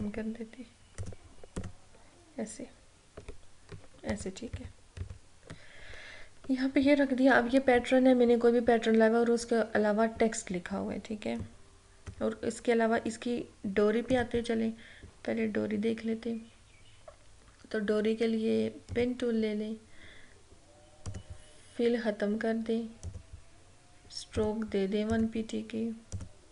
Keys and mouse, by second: 4.3 ctrl+-, 11.4-14.1 drag, 18.9 click.